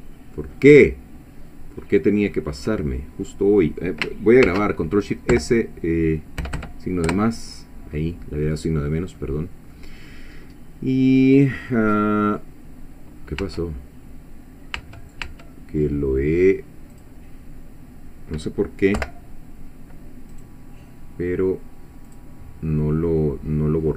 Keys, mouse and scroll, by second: 0.5-2.1 drag, 2.2-2.7 scroll up 1, 2.8-4.0 middle drag, 4.5 ctrl+shift+s, 5.3 -, 7.1 Return, 9.2 click, 10.1-10.4 scroll up 1, 10.6 scroll down 1, 13.1 scroll down 1, 13.4 Tab, 14.8 Tab, 16.9 click, 19.0 Delete, 20.4 right click, 22.1 click.